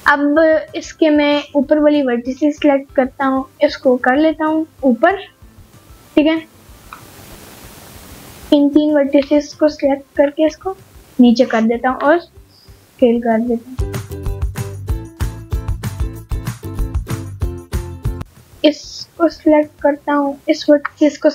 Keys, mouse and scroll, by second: 1.3 click, 1.9-2.4 scroll down 2, 2.7 g, 2.8 z, 4.1 click, 4.4-5.6 middle drag, 5.9 scroll up 1, 6.0 middle click, 7.9 click, 8.7 shift+click, 9.3 shift+click, 10.1 scroll down 1, 10.3 middle click, 10.8 g, 11.9 click, 12.5 s, 14.5 click, 14.9 scroll up 1, 15.0 middle click, 15.5-16.1 scroll up 1, 16.4 middle click, 16.4-17.3 scroll up 3, 17.5 middle click, 18.5 click, 19.2 middle click, 21.0 click.